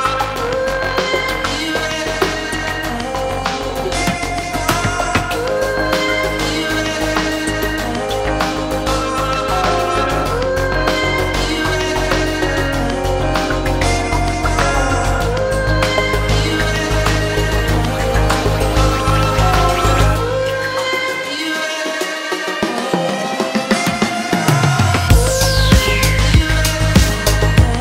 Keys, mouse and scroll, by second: 0.0-27.6 typing, 0.5 shift+middle click, 1.1 scroll down 1, 1.2 shift+middle click, 1.2 scroll up 1, 1.3 shift+middle click, 1.5 shift+click, 3.3 shift+Left, 4.6 scroll down 1, 8.3 scroll down 3, 8.3 shift+middle click, 8.4 scroll up 3, 8.6 shift+middle click, 9.8 shift+middle click, 10.0 scroll up 4, 10.1 click, 15.3 scroll down 2, 15.6 click, 16.8 scroll down 1, 16.9 shift+middle click, 17.0 scroll up 4, 17.1 click, 19.6 scroll down 1, 24.9 scroll down 1.